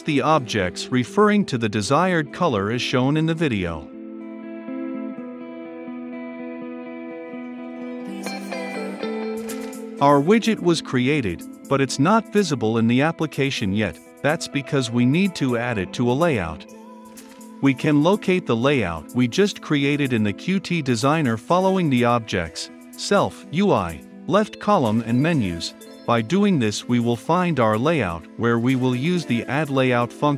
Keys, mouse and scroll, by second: 1.2 click, 2.5 ctrl+v, 3.8 click, 4.0 <, 4.0 Return, 4.3 b, 4.4 g, 4.5 Return, 4.6 Right, 4.7 shift+`, 4.7 click, 5.0 ctrl+c, 5.0 click, 5.1 ctrl+v, 5.2 ctrl+click, 5.7-7.7 typing, 6.1 click, 6.2 Return, 6.3 Return, 6.4 Left, 6.5 ctrl+v, 6.6 click, 7.1 Return, 7.5 click, 7.6 Return, 7.8 Return, 7.8 Left, 8.2 click, 8.4 ctrl+v, 8.4 click, 8.7-9.0 typing, 9.1 click, 9.2 Return, 9.2 ctrl+space, 9.3 Return, 9.7 click, 9.9 ctrl+F5, 11.6-15.9 drag, 15.9 Return, 16.2-18.4 typing, 17.1 Return, 17.6 Return, 21.3 e, 22.0 Return, 22.7 >, 25.3 Return, 26.0 >, 27.2 Down, 27.8 Return, 28.7-30.3 drag.